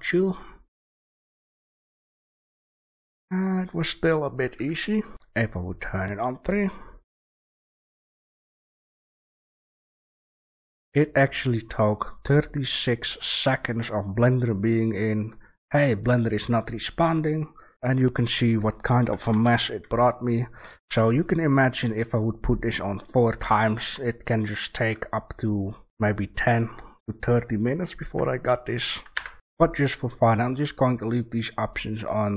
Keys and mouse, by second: 2.8-4.5 drag, 4.5 Delete, 5.1 Delete, 5.1 shift+a, 12.8-19.2 middle drag, 19.2 g, 20.7 a, 22.6-27.3 drag, 28.0 Delete, 28.9 click, 29.1 Delete.